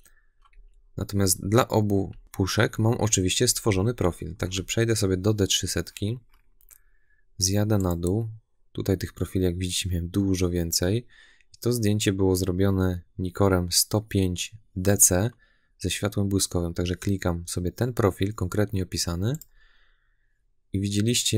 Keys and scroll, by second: 0.4 Right, 1.1 Left, 2.0 Right, 2.6 Left, 3.3 Right, 4.2 Left.